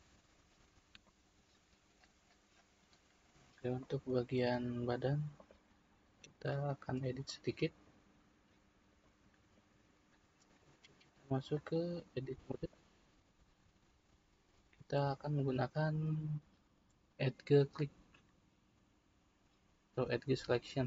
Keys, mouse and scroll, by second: 0.5-1.1 scroll down 1, 1.1-4.8 middle drag, 4.8-5.3 scroll up 2, 5.3 click, 6.2-11.5 middle drag, 11.5-14.5 drag, 17.2-20.2 drag.